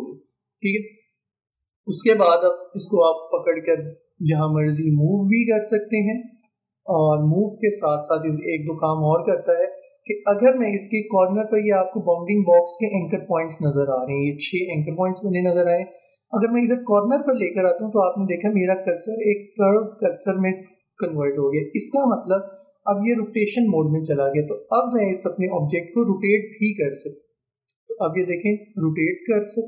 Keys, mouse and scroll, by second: 0.0 alt+scroll up 1, 0.1-0.5 alt+scroll down 1, 1.3 space, 1.5 click, 1.7 space, 2.9-10.2 drag, 10.2-10.6 alt+scroll up 1, 24.1-29.6 drag.